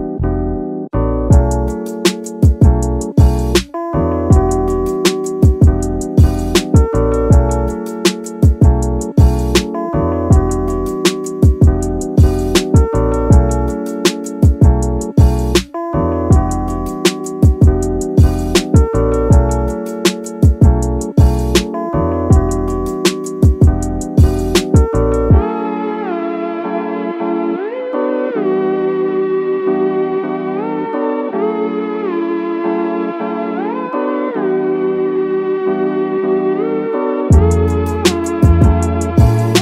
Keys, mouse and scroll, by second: 0.9 click, 1.9-2.3 drag, 3.0 click, 3.6 scroll down 2, 3.9-4.4 middle drag, 4.6-4.9 scroll up 2, 4.9 shift+middle drag, 5.2 scroll up 1, 5.3 middle click, 5.7-6.0 shift+middle drag, 6.1 scroll up 1, 6.2 middle click, 6.7 scroll down 2, 6.9 middle click, 9.7-10.5 scroll up 1, 10.6 s, 11.4 click, 12.0 KP_3, 13.3 click, 14.7 click, 15.6 click, 15.9 scroll up 1, 16.0 middle drag, 16.3 scroll down 2, 16.5 scroll up 1, 16.6 middle drag, 17.1 shift+middle drag, 17.4-17.8 scroll up 2, 17.8 shift+middle drag, 18.2-20.8 middle drag, 20.9 scroll up 1, 21.0 scroll down 1, 21.2 middle click, 21.9 KP_5, 22.7 scroll up 1, 23.0 shift+middle click, 24.0 KP_1, 24.8 middle drag, 25.5 middle click, 27.3 scroll down 2, 27.5 middle click, 27.9 scroll up 1, 32.8 click, 34.1-34.8 typing, 34.6 shift+right click, 35.8 KP_3, 37.3-38.5 drag, 39.5 s.